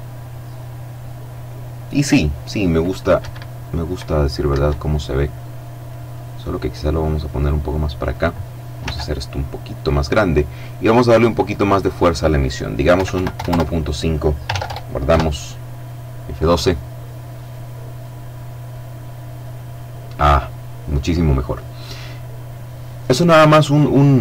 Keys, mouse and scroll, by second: 2.0 Escape, 3.4 Escape, 4.2-5.7 drag, 5.7 middle click, 6.0-7.6 drag, 7.7 s, 8.6 click, 9.9 click, 11.8 KP_1, 12.0 KP_Decimal, 12.2 KP_5, 12.3 KP_Enter, 13.4 ctrl+s, 13.5 ctrl+Return, 13.9 ctrl+F12.